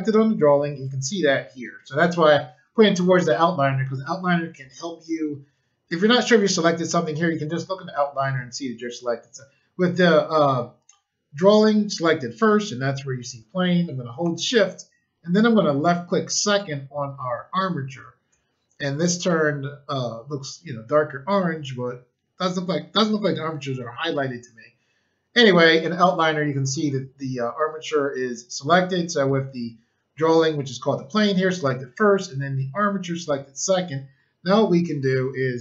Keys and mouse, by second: 16.4 shift+click.